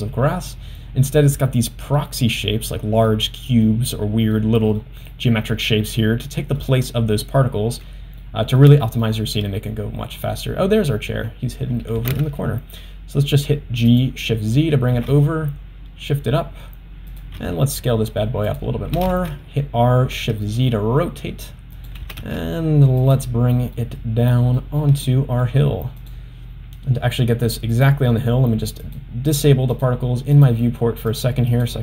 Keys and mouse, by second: 2.0 middle click, 3.2 middle click, 4.4 middle click, 6.3 middle click, 9.1 shift+middle click, 12.0 g, 15.1 g, 17.4 s, 19.0 r, 22.0 g, 23.8-24.6 middle drag, 25.1-25.5 middle drag, 26.0 click, 27.8 click, 28.9 click, 29.4 click, 29.8 click, 30.4 drag, 31.2 click, 31.6 click.